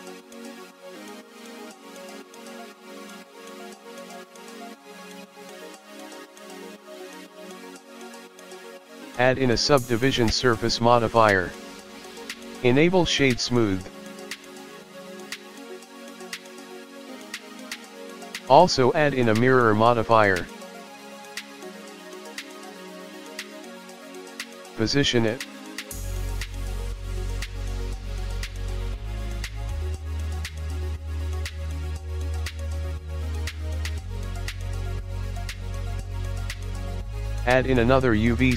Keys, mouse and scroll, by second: 0.2 KP_1, 0.8 KP_3, 2.1 r, 3.5 g, 6.4 KP_1, 7.0-7.7 scroll up 3, 8.0 click, 8.6 right click, 9.2 click, 10.3 click, 10.6 click, 11.1 right click, 11.5 click, 12.7 KP_3, 14.1 click, 14.9 g, 15.8 r, 16.8 KP_1, 17.1 click, 17.8 click, 18.3 click, 20.1 click, 20.6 click, 21.2 scroll down 3, 21.5-21.9 scroll up 4, 21.9 middle click, 23.4 KP_3, 25.0 click, 25.7 r, 28.1 g, 29.3 KP_1, 29.7 click, 30.6 middle click, 32.1 KP_1, 32.5 click, 33.0 g, 34.8 click, 35.3 middle click, 36.2 KP_1, 36.7 scroll down 5, 37.0 shift+middle click, 37.4 scroll up 2, 38.3 shift+a.